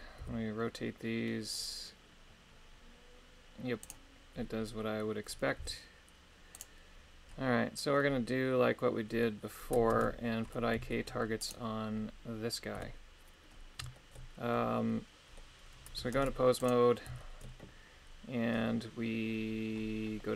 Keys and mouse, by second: 0.2 r, 5.6 r, 6.6 right click, 10.0 ctrl+Tab, 10.9 shift+middle click, 11.4 right click, 12.8 KP_3, 14.0 shift+middle click, 14.5-15.8 middle drag, 16.2 ctrl+Tab, 16.6 right click, 17.2 shift+middle click.